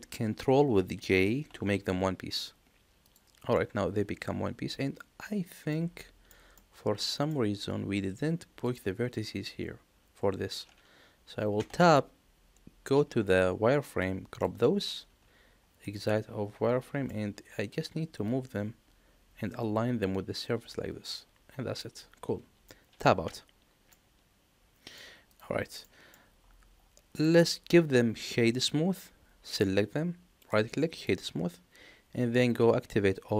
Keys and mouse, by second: 1.3 ctrl+j, 2.9 click, 3.4-5.6 middle drag, 5.9 shift+middle drag, 6.4-7.2 middle drag, 11.5 Tab, 12.8 z, 14.0 click, 15.0 z, 15.7-17.0 middle drag, 18.2-21.7 drag, 22.6 middle click, 23.1 Tab, 23.8-24.9 middle drag, 25.7 middle click, 27.0 click, 30.3 right click.